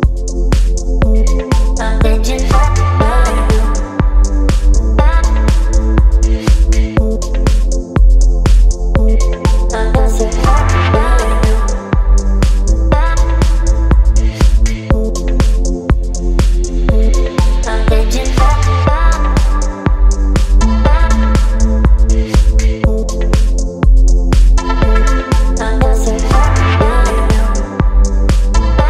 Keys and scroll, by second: 10.2 space, 19.5 Return, 22.3 space, 24.6 space, 27.2 ctrl+t.